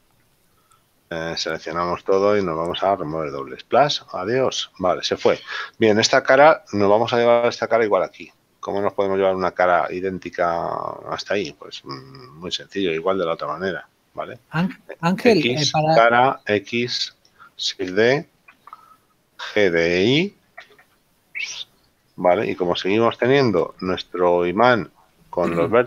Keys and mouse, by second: 3.4 click, 5.9 right click, 10.5 middle click, 15.1 x, 15.8 click, 16.5 right click, 18.8 shift+d, 19.1 click, 22.5 click.